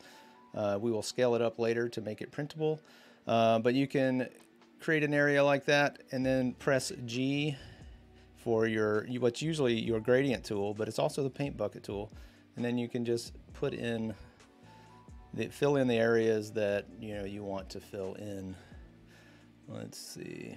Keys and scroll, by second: 6.6 g.